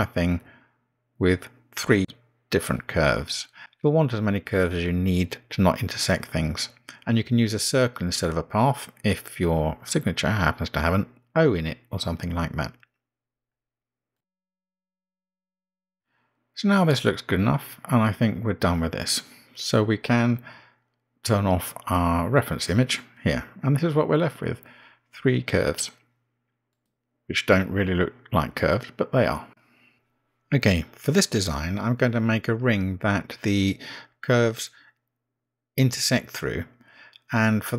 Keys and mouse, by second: 3.0 click, 4.1 g, 7.2 click, 7.5 g, 10.6 g, 14.3 g, 14.8 click, 14.9 g, 15.4 g, 16.0 g, 24.8 click, 31.9 click, 37.1-37.7 drag.